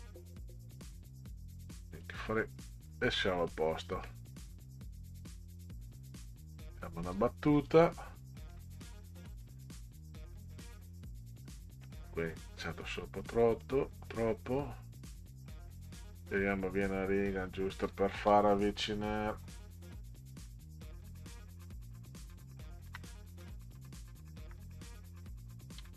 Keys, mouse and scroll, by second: 1.9 click, 3.4 click, 6.6 click, 8.5 Return, 10.0-10.6 scroll down 4, 11.4 scroll down 2, 13.3 click, 13.5 click, 17.7-20.3 drag, 20.4 Delete, 21.8 click, 22.9 BackSpace, 24.4 Delete, 25.8 a.